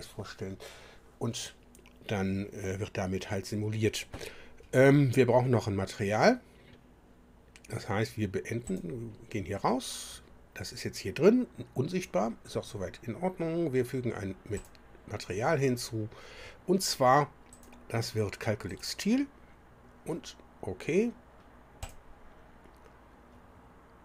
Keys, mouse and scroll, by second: 8.6 click, 14.6 click, 17.5 click, 18.7 click, 21.8 click.